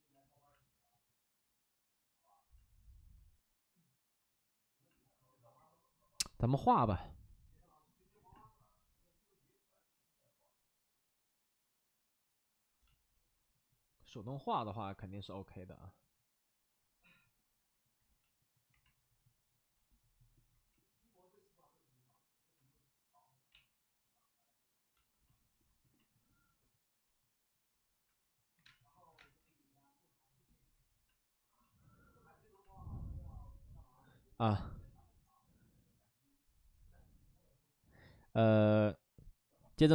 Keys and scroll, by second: 0.4 ctrl+z, 23.4 ctrl+z, 28.6 space, 29.1 space.